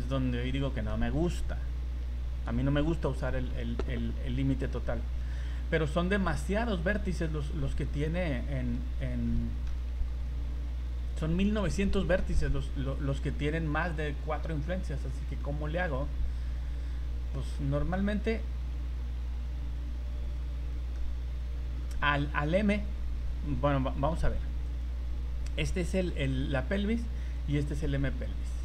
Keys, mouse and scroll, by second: 0.7 middle click, 1.5 ctrl+z, 2.0 ctrl+z, 4.6 middle click, 6.1 scroll down 2, 6.6 middle click, 8.1 scroll up 2, 8.8 z, 9.2 middle click, 10.1 z, 14.9 scroll down 3, 15.4 middle click, 16.9 scroll up 2, 17.3 shift+middle click, 17.7 middle click, 20.9 middle click, 24.2 v, 24.7 right click, 25.7 middle click, 27.4 right click.